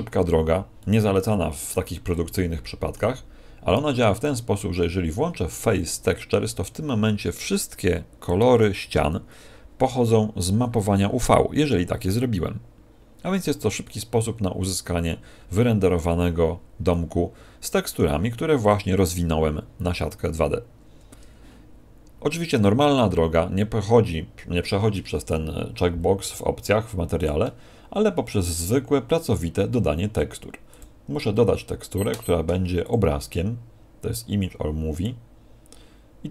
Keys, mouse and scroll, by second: 0.7 middle click, 2.1 middle click, 16.8 middle click, 22.5 click, 27.1 click, 30.6 click, 31.9 click, 32.7 click.